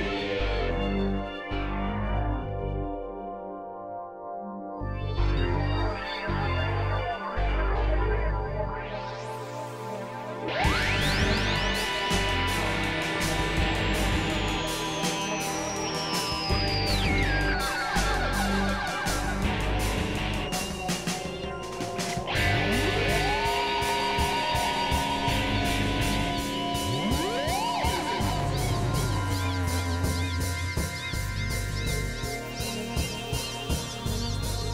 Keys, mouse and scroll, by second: 0.7 click, 0.9-2.3 middle drag, 2.3 f, 3.7 click, 5.0 click, 6.4 click, 10.0 click, 10.5 click, 11.8 click, 14.5 click, 17.0 middle click, 18.3 click, 19.5 click, 20.9 click, 22.5 middle click, 23.1 middle click, 25.8 click, 27.2 middle click, 28.1 click, 28.4-29.8 middle drag, 29.8 click, 33.7 click, 34.6-34.7 drag.